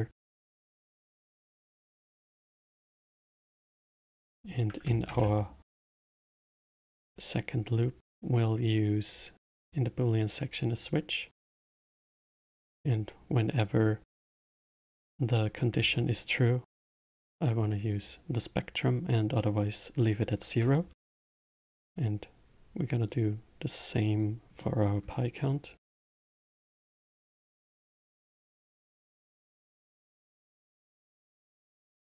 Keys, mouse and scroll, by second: 0.3 middle click, 1.0-1.4 scroll down 2, 1.4-2.7 middle drag, 2.7 click, 3.6-4.1 middle drag, 4.1-4.7 scroll up 4, 5.0 shift+a, 12.7 click, 15.8-17.3 scroll up 1, 17.3 click, 20.2 click, 21.2 shift+d, 23.0 click, 24.5-25.7 middle drag, 25.7-27.2 drag, 27.2-28.9 middle drag, 28.9-32.0 drag.